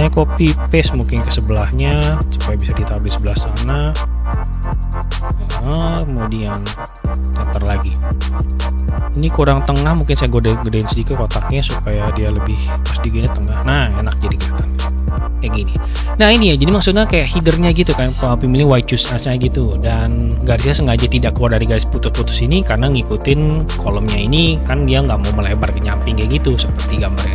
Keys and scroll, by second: 0.6 ctrl+c, 1.0 ctrl+v.